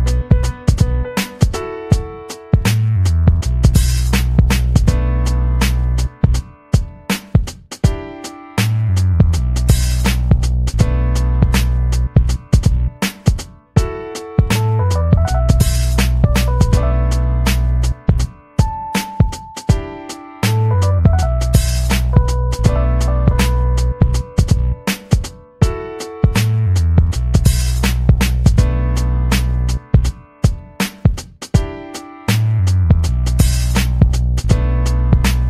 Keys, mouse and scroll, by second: 7.4-7.9 ctrl+scroll down 2, 8.1-8.4 ctrl+scroll down 2, 9.0-11.5 ctrl+scroll down 13, 11.7-12.5 scroll down 4, 12.7 scroll down 2, 13.6 scroll down 2, 14.4 scroll down 2, 17.2-18.9 drag, 19.0 ctrl+scroll down 2, 20.0-20.4 scroll down 2, 20.8 scroll down 2, 21.3-23.2 drag, 23.4-23.8 scroll up 2, 24.3-26.2 scroll up 2, 26.2 click, 26.5-27.6 typing, 30.3 click, 32.2-33.0 scroll up 4, 34.2 scroll up 2, 34.7-35.4 scroll up 6.